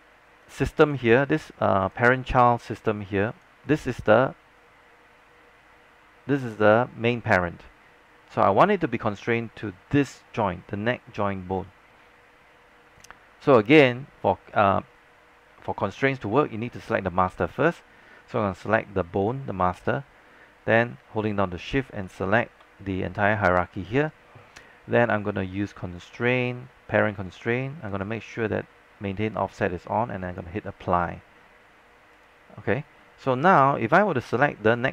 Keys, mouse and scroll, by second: 0.5 click, 10.2-10.8 alt+scroll up 2, 17.7 click, 22.1 shift+click, 26.1 click, 33.0-33.6 scroll down 1, 34.2 click.